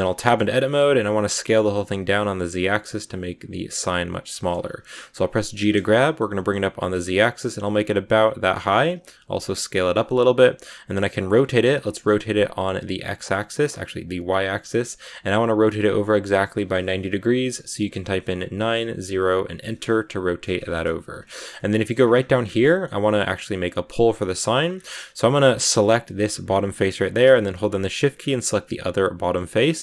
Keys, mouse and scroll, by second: 0.2 shift+middle click, 0.4 scroll up 1, 1.2 s, 4.5-5.4 scroll down 2, 5.4 g, 8.6 shift+middle click, 8.9 s, 10.7 r, 19.7 middle click, 20.7-21.1 scroll up 2, 21.1 shift+middle click, 21.8 scroll down 1, 21.9-22.4 scroll up 8, 22.4-24.6 middle drag, 24.6 scroll up 1, 25.5 right click, 25.9 middle click, 26.2 scroll up 1, 27.8 shift+right click, 28.0 scroll down 3, 28.3-29.5 middle drag, 29.5 scroll up 2, 29.7-29.8 middle drag.